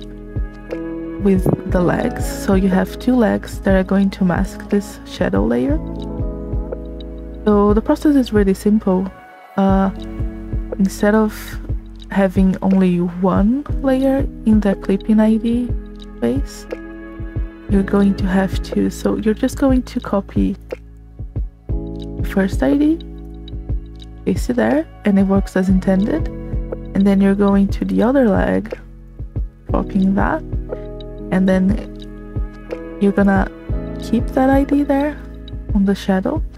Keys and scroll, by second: 24.9 Return, 31.3 c.